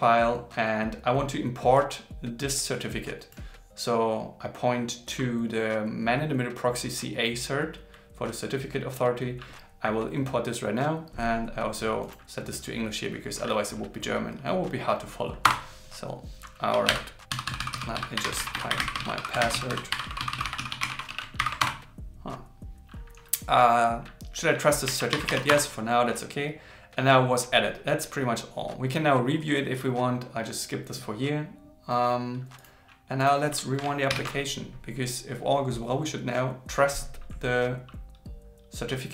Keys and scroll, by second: 21.4 shift+ß, 34.1 ctrl+shift+r.